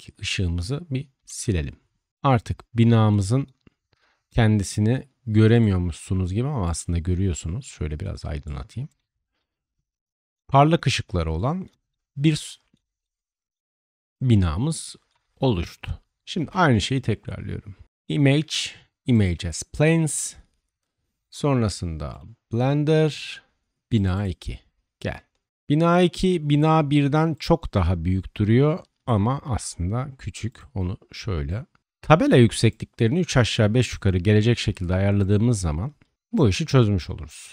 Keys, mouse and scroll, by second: 1.1 typing, 5.5 right click, 6.6-8.8 middle drag, 8.8 click, 8.9-19.3 middle drag, 16.3 shift+a, 24.5 middle click, 25.5-30.5 drag, 29.3 s, 30.5-31.4 middle drag, 31.4-35.3 drag, 34.3 s, 35.3-35.9 middle drag, 35.9-37.5 drag.